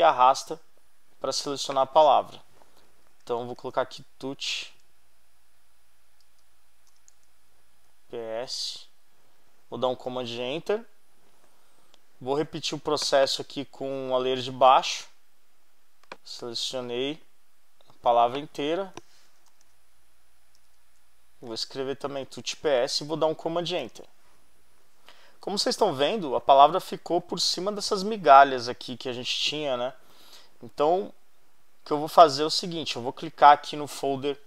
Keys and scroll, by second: 2.9-4.2 typing, 6.2-7.6 typing, 10.1 super+Return, 19.0-20.8 typing, 23.8 super+Return.